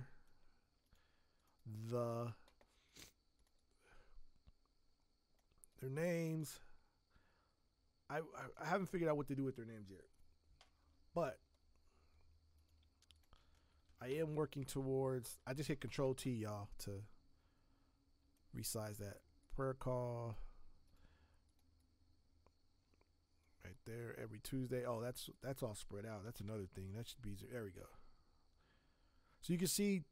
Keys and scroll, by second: 13.7 ctrl+t.